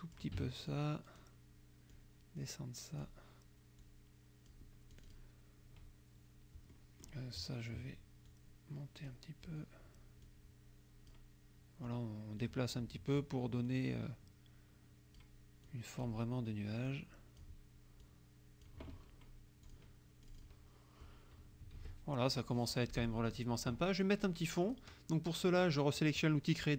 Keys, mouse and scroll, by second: 0.8 click, 2.0-3.3 drag, 3.8 click, 5.0 click, 6.8 click, 8.3 click, 10.3-11.3 drag, 12.0 click, 13.7-15.4 drag, 15.7 click, 16.9 click, 18.1 click, 19.8 click, 20.3 click, 21.7 KP_Subtract, 22.9 click, 24.7 click.